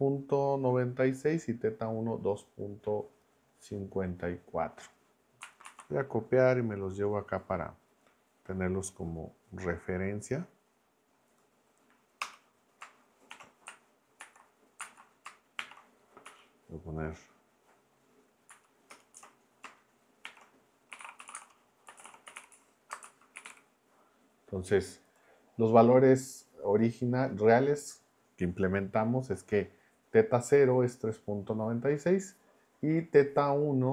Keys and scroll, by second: 5.6 super+c, 12.2 Return, 13.3 shift+3, 14.2 super+v, 14.8 super+Left, 15.6 shift+3, 16.2 Up, 18.5 Left, 18.9 Return, 19.1 Up, 20.2-23.9 typing.